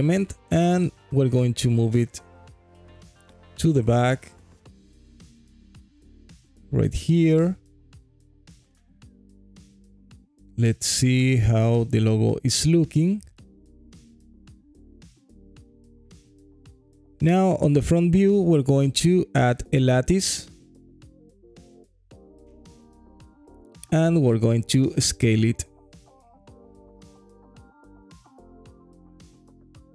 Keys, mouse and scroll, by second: 0.9 alt+middle click, 1.3 scroll up 2, 1.7 alt+click, 2.5 g, 2.7 y, 8.0 click, 8.5 click, 8.9-11.9 alt+drag, 12.1 alt+middle click, 12.6 scroll down 1, 13.0 alt+click, 13.6 scroll down 1, 14.0-16.6 alt+drag, 16.6 KP_1, 17.6 shift+a, 23.5 Tab, 23.5 click, 24.1 s, 26.9 click, 27.4 g, 27.7 x, 29.3 click, 29.8 g.